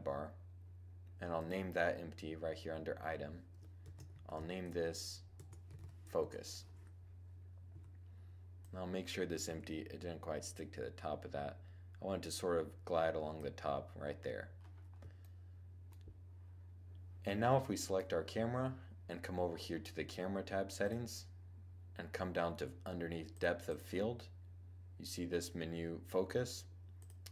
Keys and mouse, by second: 1.6-2.9 drag, 7.5 z, 8.4-12.4 drag, 9.2 z, 13.1-15.0 middle drag, 15.1-16.9 middle drag, 17.5-19.3 right drag, 22.1 click, 23.0-25.3 drag, 26.6-27.3 drag.